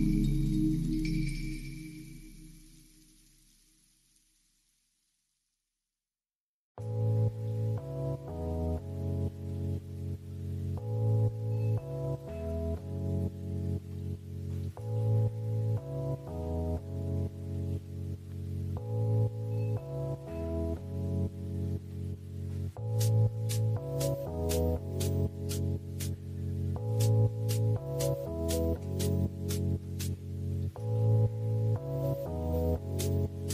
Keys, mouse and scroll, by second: 2.0 click, 5.2 click, 9.4 click, 9.8 middle click, 11.0-12.2 drag, 13.0 click, 14.8 click, 15.5 drag, 16.1 click, 17.6 click, 20.2 click, 22.7-27.1 drag, 27.8 click, 32.7 ctrl+s, 33.1 click.